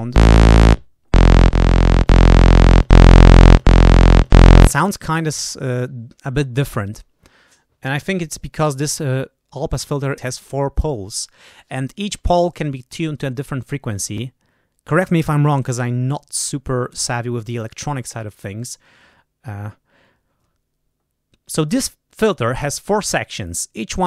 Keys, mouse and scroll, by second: 2.7 click, 3.4 click, 4.1 click, 18.5 right click.